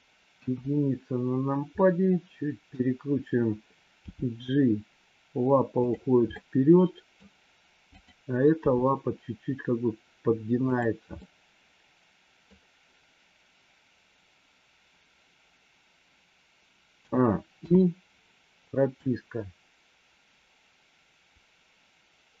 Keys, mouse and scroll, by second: 0.3 KP_1, 1.6-2.6 middle drag, 3.9 g, 6.3 middle click, 7.9 click, 8.6 g, 11.3-12.4 middle drag, 17.5 i, 18.9-22.4 drag.